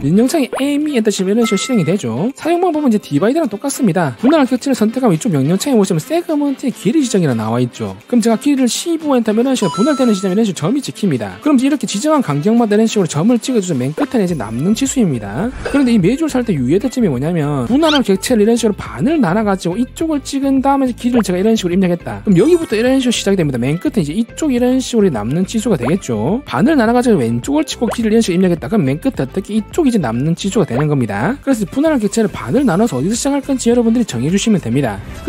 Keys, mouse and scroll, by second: 1.0 e, 5.3 click, 8.9 1, 9.2 5, 21.1 click, 21.2-22.1 typing, 21.8 right click, 24.0 w, 24.2 right click, 24.8 click, 25.0 shift+right click, 25.3 d, 25.6 click, 25.8 click, 26.0 right click, 27.8-30.3 typing, 27.8 click, 28.4 right click, 29.5 right click, 29.7 click, 30.0 shift+right click, 30.5 click, 30.8 click, 30.9 right click.